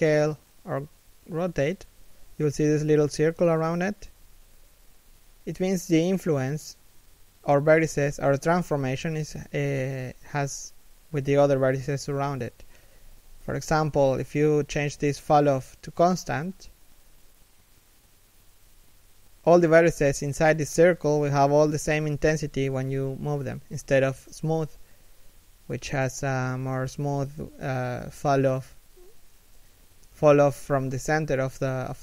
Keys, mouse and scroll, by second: 6.4 r, 15.2 g, 24.1 g, 30.1 g, 31.6 r.